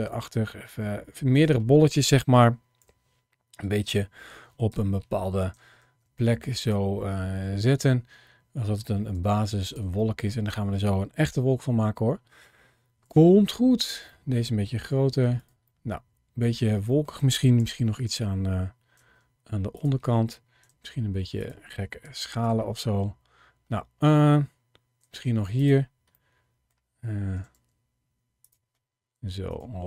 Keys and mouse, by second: 0.5 s, 1.2 click, 2.6 KP_1, 4.5 KP_3, 5.9 shift+d, 6.5 click, 7.0 middle click, 7.8 d, 9.0 g, 9.5 click, 9.8 middle click, 11.1 KP_7, 12.9 shift+d, 14.0 middle click, 14.7 s, 15.2 click, 15.6 middle click, 16.8 middle click, 17.4 KP_1, 18.8 shift+d, 20.5 s, 20.5 x, 21.2 click, 21.9 g, 22.3 click, 22.6-24.0 middle drag, 24.9 shift+d, 25.4 click, 26.1 middle click, 27.2 s, 27.4 x, 28.3 click, 29.0 g, 29.3 click.